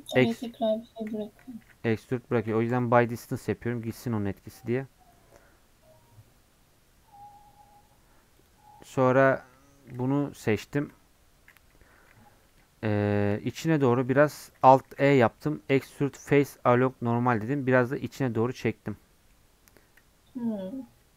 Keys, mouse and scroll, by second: 1.1 ctrl+z, 1.6 a, 2.8 m, 3.1 scroll up 2, 8.5 alt+click, 9.3 scroll down 1, 9.5 scroll up 2, 10.8 KP_Decimal, 11.1-11.9 scroll up 1, 11.9 shift+middle click, 12.1-12.9 scroll up 3, 12.9 shift+middle click, 13.3-13.8 scroll down 1, 13.8 middle click, 14.1 scroll up 1, 15.9 alt+e, 18.4-20.6 middle drag, 20.6 Tab, 20.7 scroll down 1.